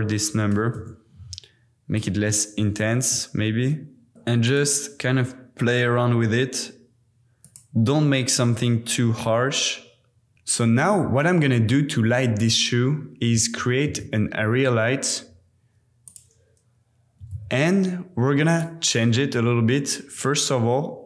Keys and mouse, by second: 1.9-4.1 middle drag, 4.1 KP_7, 4.1 r, 4.5 click, 4.9 g, 7.4 click, 8.9 g, 13.8 shift+a, 17.2 g, 17.3 z, 18.5 click.